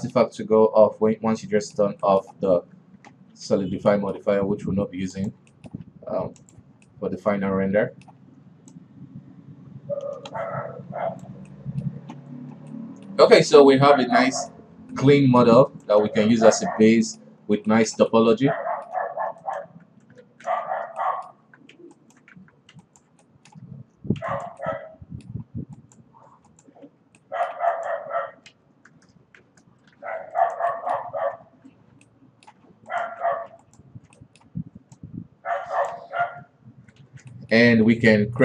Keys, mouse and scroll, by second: 3.0 Tab, 3.9 alt+a, 4.4 middle click, 4.7 Tab, 5.6 click, 6.0-6.9 middle drag, 6.9 click, 7.3-9.2 middle drag, 9.2-12.0 shift+drag, 12.0 middle click, 12.5 alt+a, 13.2-16.2 middle drag, 16.2 right click, 16.5 alt+w, 16.8 middle drag, 17.1 alt+a, 17.3-17.8 middle drag, 17.8-18.1 scroll up 1, 18.1-19.9 shift+middle drag, 19.9 right click, 20.1 Tab, 20.7 shift+z, 21.5-21.9 middle drag, 21.9 Tab, 22.4 alt+right click, 22.8 Tab, 23.3 alt+right click, 23.7-24.2 middle drag, 24.2 shift+Tab, 24.7 alt+right click, 25.1-25.9 middle drag, 25.9 scroll up 1, 26.2 right click, 27.0 right click, 27.3 l, 27.7-28.2 middle drag, 28.2 right click, 29.0 l, 29.8 shift+h, 30.4 alt+a, 30.9 alt+right click, 31.2 middle click, 31.6 alt+KP_2, 31.9 KP_1, 32.6-33.4 middle drag, 33.4 alt+right click, 34.1 alt+right click, 34.6-35.4 middle drag, 35.4-36.4 drag, 36.4 Tab, 37.5 shift+z, 37.8-38.3 middle drag, 38.3 scroll down 1.